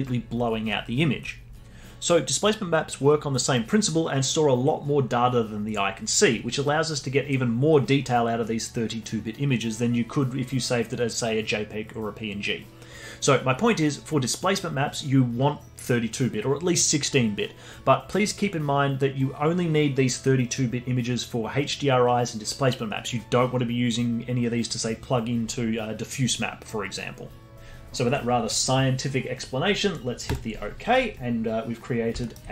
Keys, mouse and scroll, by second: 31.8-32.2 scroll down 2, 32.2 alt+middle click.